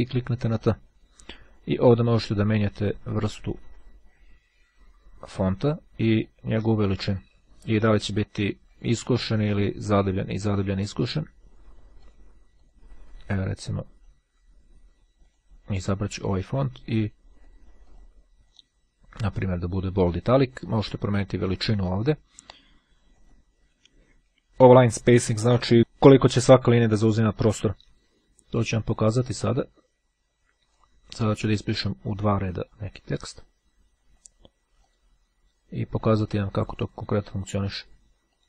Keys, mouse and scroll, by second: 0.7 click, 2.0 click, 6.1-7.7 drag, 8.2 click, 9.3 click, 10.1 click, 12.1 click, 13.9-14.7 scroll down 2, 15.3 click, 17.5-19.2 drag, 19.4 click, 20.7 click, 23.3 click, 29.1 click, 30.9 click, 32.7 click, 34.3 click, 36.4 click.